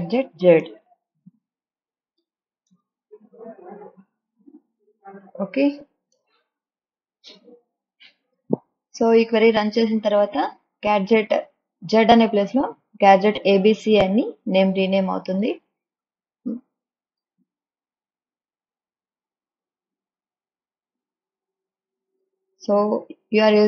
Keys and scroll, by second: 0.0-2.9 typing, 4.3 shift+z, 5.3 Right, 6.2 ;.